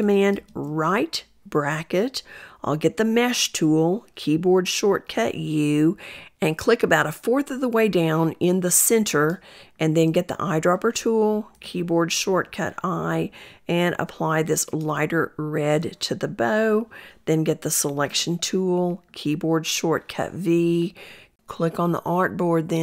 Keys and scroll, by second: 2.7 u, 3.6 u, 9.9 i, 17.2 v.